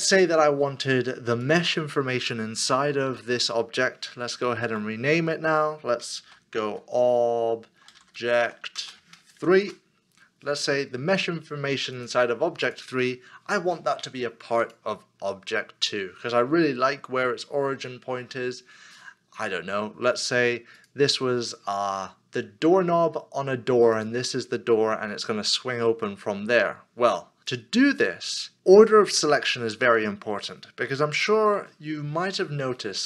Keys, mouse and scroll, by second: 4.7 F2, 6.2 shift+o, 7.9-9.4 typing, 9.6 Return, 31.9 Return, 32.0-32.4 scroll up 1.